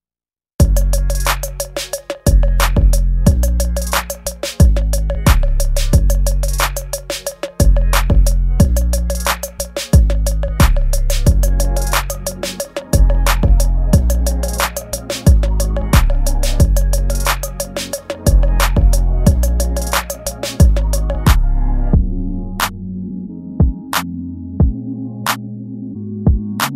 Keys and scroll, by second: 0.4 ctrl+s, 1.1 ctrl+z, 3.0 space, 3.7 space, 5.7 space, 6.4 space, 8.8 ctrl+z, 12.6 ctrl+z, 12.9 ctrl+z, 13.2 ctrl+z, 17.3 space, 17.8 space, 19.0 space, 21.4 space, 23.5 space, 24.9 space, 25.7 space, 26.2 ctrl+z.